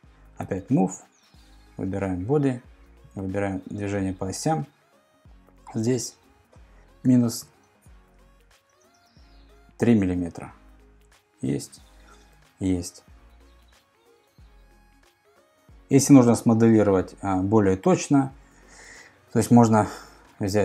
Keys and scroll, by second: 0.4 m, 6.8-8.6 typing, 11.0 Return.